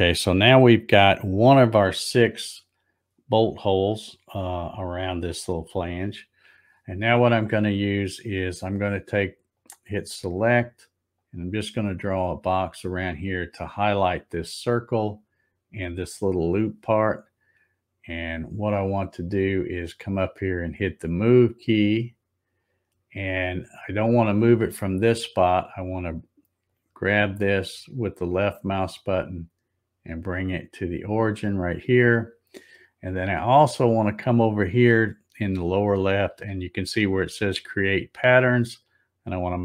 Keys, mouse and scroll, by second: 9.6 click, 11.2-12.9 drag, 21.6 click, 26.7-31.2 drag, 38.9 click.